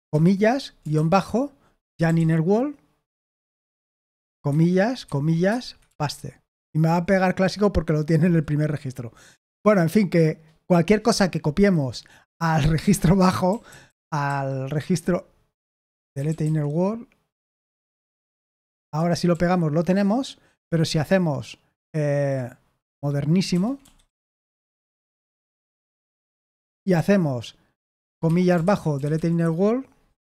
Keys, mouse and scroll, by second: 1.6-2.6 typing, 5.2-6.8 typing, 9.5 Escape, 13.4-13.9 typing, 15.9-16.8 typing, 18.9 Escape, 19.3 p, 22.9-26.1 typing, 29.1 typing.